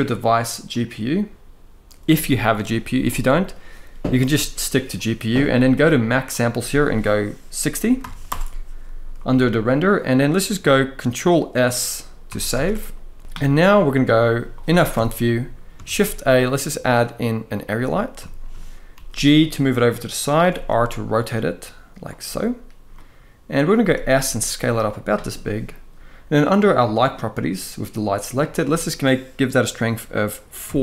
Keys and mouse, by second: 6.1-8.0 drag, 12.1 ctrl+s, 12.3 ctrl+s, 13.2 ctrl+b, 14.6 KP_1, 15.6 shift+a, 17.9-18.2 shift+middle drag, 18.6 g, 20.2 r, 22.7-23.3 middle drag, 23.5 s, 24.5 click, 26.6 click, 28.1-30.8 drag, 30.7 0.